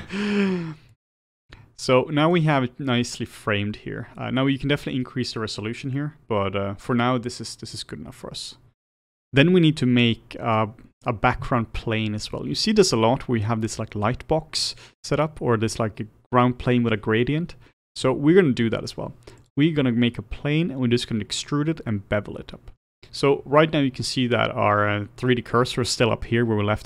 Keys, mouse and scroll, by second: 14.7-15.2 scroll down 1, 15.2-26.8 middle drag.